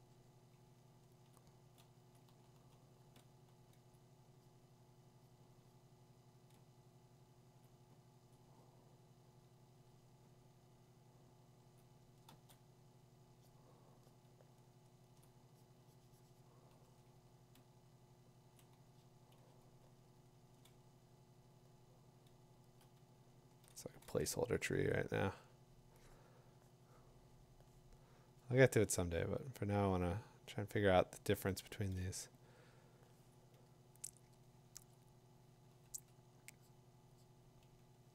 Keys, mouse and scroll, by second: 1.3 click, 2.2 click, 2.6 2, 6.9 click, 7.6 click, 8.3 click, 11.7 click, 12.3 click, 12.3 2, 15.2 click, 16.8 click, 17.1 3, 18.4 click, 22.4-24.7 typing, 23.2-25.9 drag, 29.4-31.3 drag, 32.0 click, 32.7 click, 34.9 click, 35.7 click, 35.9 click.